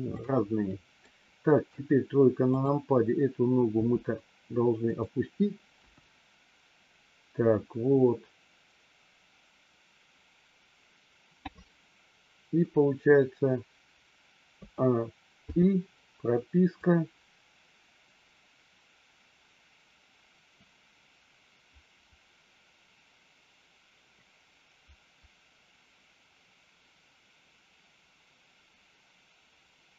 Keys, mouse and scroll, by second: 0.0 scroll up 1, 0.1 middle click, 1.5 KP_3, 2.4 click, 3.6 r, 5.8 KP_1, 15.4 i, 16.8-29.9 drag.